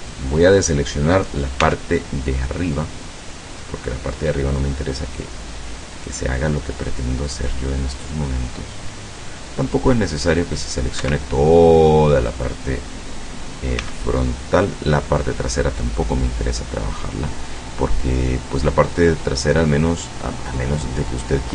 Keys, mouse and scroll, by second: 1.6 c, 2.8-11.1 drag, 11.1 Escape, 11.3-12.5 drag, 13.9 c, 14.2 middle click, 14.3 click, 14.4 middle click, 14.4-21.5 drag.